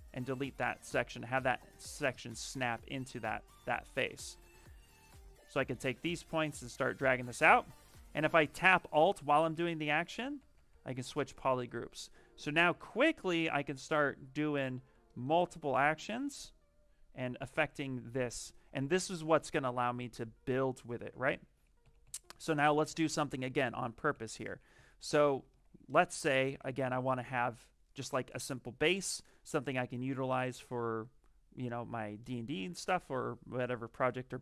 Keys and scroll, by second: 3.5 ctrl+z, 21.4 ctrl+z, 21.7 ctrl+z, 21.9 ctrl+z, 22.1 ctrl+z, 22.3 ctrl+z, 22.8 ctrl+z, 23.0 ctrl+z, 23.2 ctrl+z, 23.4 ctrl+z, 23.7 ctrl+z, 24.0 ctrl+z, 24.3 ctrl+z, 24.6 ctrl+z, 25.0 ctrl+z, 26.4 ctrl+z.